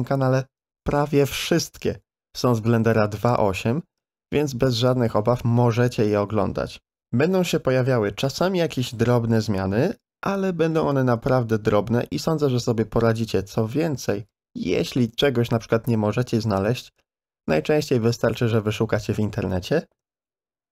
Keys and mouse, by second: 2.7 shift+d, 5.8 ctrl+z, 10.7 shift+d, 13.2 ctrl+shift+click, 14.5-16.2 drag, 16.5 s.